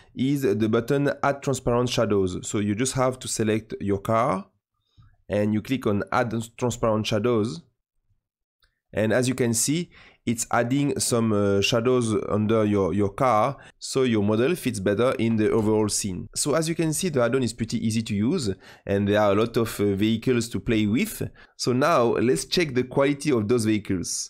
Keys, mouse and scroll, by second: 3.3 click, 6.6-9.7 drag.